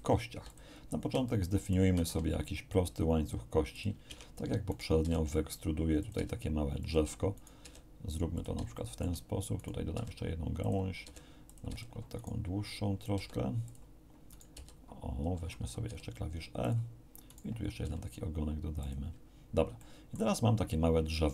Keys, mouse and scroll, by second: 0.3 x, 0.5 click, 1.2 shift+click, 1.9 shift+a, 3.7 click, 4.1 Tab, 4.7 right click, 5.0 e, 6.0 click, 6.1 e, 6.8 click, 7.3 right click, 7.6 e, 8.3 shift+click, 8.7 shift+middle click, 9.5 right click, 9.9 e, 10.6 click, 11.0 e, 11.5 click, 11.6 e, 12.1 right click, 13.1 g, 13.6 click, 14.3 right click, 14.5 w, 15.8 e, 16.6 click, 17.3 right click, 17.8 e, 18.8 click, 19.5 scroll down 1, 19.7 shift+click, 19.9 shift+middle click.